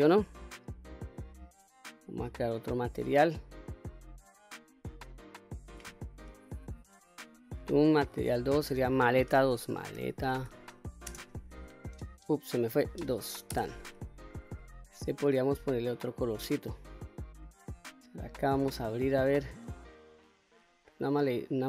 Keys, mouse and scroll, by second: 0.2-2.2 middle drag, 2.4-3.9 scroll up 2, 3.9 click, 5.0 click, 7.6 click, 8.4-14.6 drag, 15.8 shift+middle click, 17.8 click.